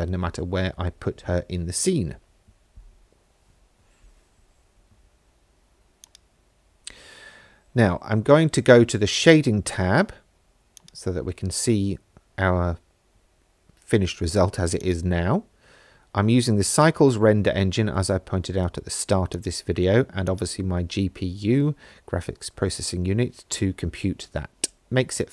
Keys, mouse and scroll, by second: 6.1 click, 9.3 click, 10.8 click, 14.8-17.2 drag, 19.3 click.